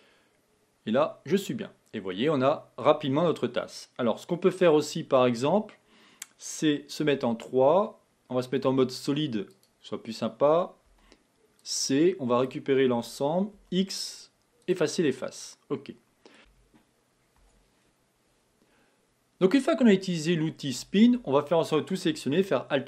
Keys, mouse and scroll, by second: 0.0 BackSpace, 1.0-4.0 middle drag, 7.2 3, 8.6 z, 11.1 c, 13.6 x, 15.2-16.4 middle drag, 16.4 Tab, 16.5 KP_1, 17.5 Tab, 20.8 a, 21.1 a, 22.5 alt+m.